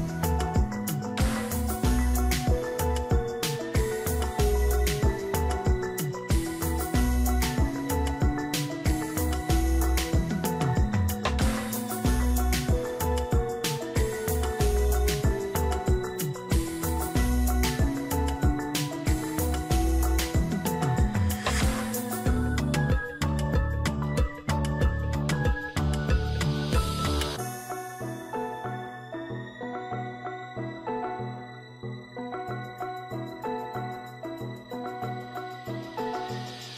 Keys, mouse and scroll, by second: 2.9 ctrl+=.